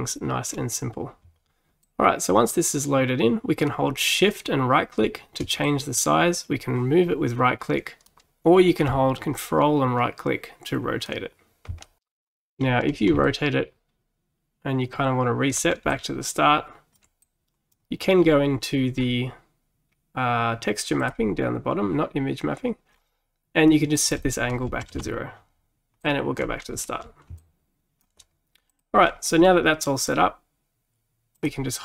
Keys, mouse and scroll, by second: 1.9-12.0 shift+right drag, 13.3-18.3 shift+right drag, 18.3-19.0 scroll down 4, 19.0-19.8 scroll down 3, 19.8-20.6 scroll down 1, 20.6-21.0 scroll down 1, 21.1-23.0 drag, 23.0-24.0 scroll down 1, 24.0-26.1 drag, 26.1-28.8 right drag, 28.8-29.1 drag, 29.1-31.4 scroll up 11, 31.4-31.8 drag.